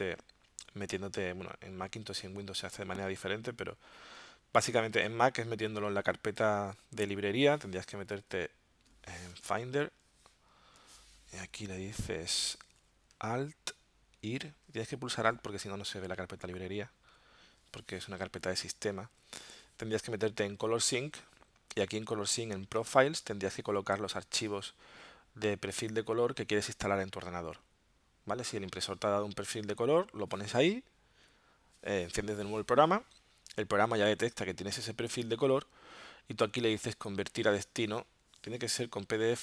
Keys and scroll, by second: 9.5 super+Tab.